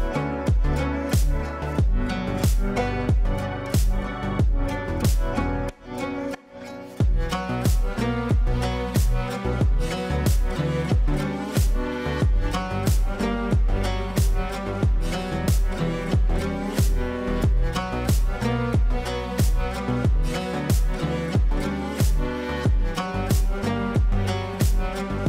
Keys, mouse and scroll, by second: 2.5 space, 3.4-10.9 drag, 12.3-15.5 shift+drag, 15.5 right click, 15.9 click, 17.8 ctrl+a, 20.0-25.2 typing.